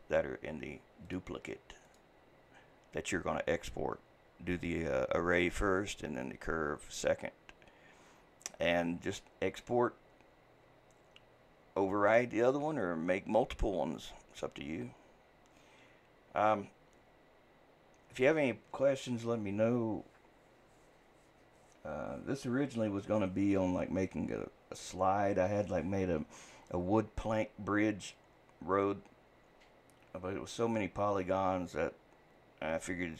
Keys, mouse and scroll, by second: 1.1 click, 1.9 click.